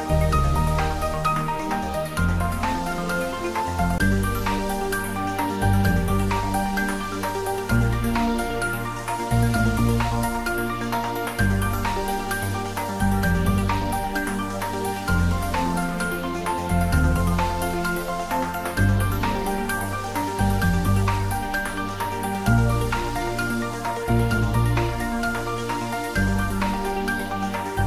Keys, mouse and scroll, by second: 0.6 click, 2.1 g, 8.9 click, 11.5-12.1 scroll up 1, 14.6-22.4 drag, 22.4 g, 22.7 y, 23.7 Down, 27.5 space.